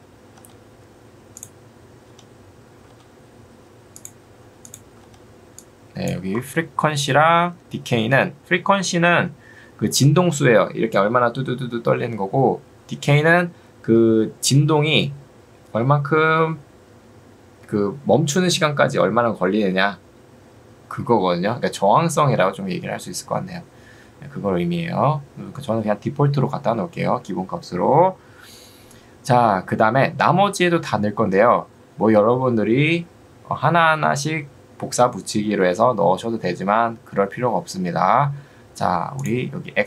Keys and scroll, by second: 24.0 Escape.